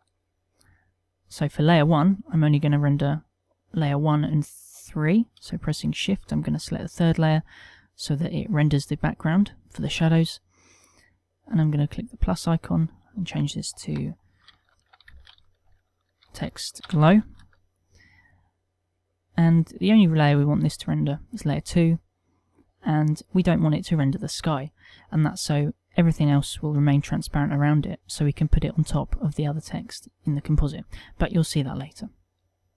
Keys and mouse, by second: 0.1 shift+3, 3.2 click, 6.6 shift+click, 12.4 click, 21.8 click, 24.4 middle click, 24.4 click.